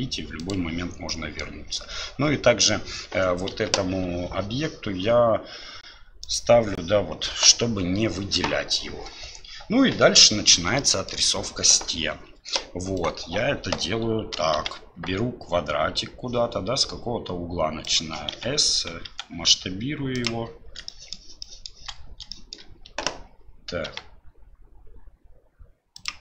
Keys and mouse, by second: 0.4-1.1 drag, 1.1 middle click, 3.5 KP_7, 10.7-11.1 shift+middle drag, 20.9 shift+click, 21.4 shift+click, 22.3 shift+click, 23.8 g.